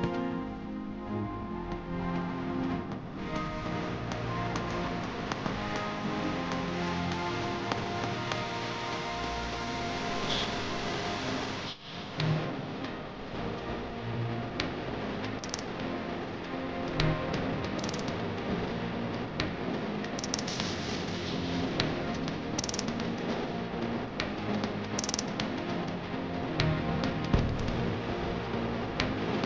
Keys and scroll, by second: 0.0-1.3 typing, 3.2 Home, 4.3-7.5 typing, 10.9 Home, 11.0 shift+End, 11.7-13.7 typing.